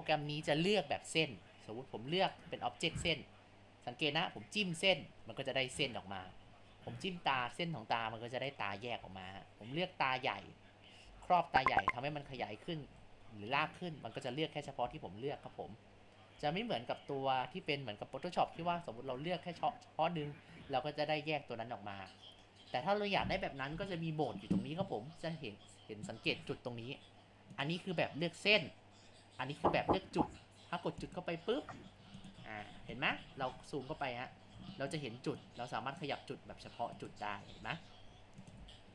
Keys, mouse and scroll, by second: 1.3 click, 2.4 click, 3.2 click, 5.0-5.6 drag, 5.6 g, 6.4 ctrl+z, 7.0 click, 8.1 g, 8.9 ctrl+z, 9.4-11.1 drag, 11.1 s, 12.3 ctrl+z, 12.8 g, 14.9 ctrl+z, 15.8 click, 16.4 s, 17.2 g, 18.1 g, 19.2 drag, 22.8 click, 27.5 click, 31.0 click, 32.2 click, 32.5 scroll up 1, 33.0-33.6 middle drag, 34.8-35.5 middle drag, 35.5 click, 36.4 g, 37.6 z, 38.0 g, 38.6 z.